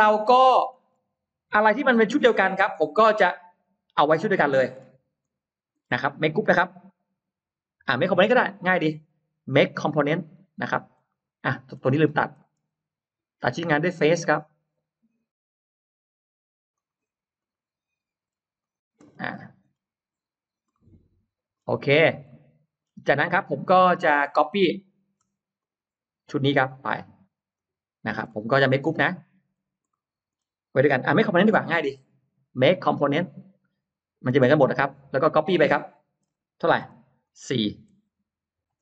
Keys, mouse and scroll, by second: 0.2 scroll down 1, 0.5-0.9 scroll up 1, 1.3 click, 2.2 shift+click, 3.4 shift+click, 4.3-5.0 shift+scroll up 1, 5.0 shift+click, 5.6-5.9 shift+scroll down 1, 8.5 right click, 10.0 click, 10.4-11.1 scroll up 4, 10.9 middle click, 11.6-11.9 scroll down 2, 11.9 scroll up 2, 14.3 click, 16.6 click, 17.2 click, 17.9 scroll up 2, 18.4 click, 18.9-19.6 scroll down 4, 20.3-20.7 scroll up 1, 20.7 middle click, 21.4-22.0 scroll down 1, 22.1 middle click, 23.0-24.4 scroll up 3, 23.6 middle click, 24.0 space, 24.6 click, 25.4 shift+click, 26.3 shift+click, 27.4 shift+click, 28.1-28.4 shift+scroll up 2, 28.3 middle click, 28.5-29.4 scroll down 4, 29.8 middle click, 30.6 scroll up 2, 31.9 right click, 33.0 click, 34.3 click, 34.9 scroll down 1, 35.3 middle click, 37.1 click, 37.1 m.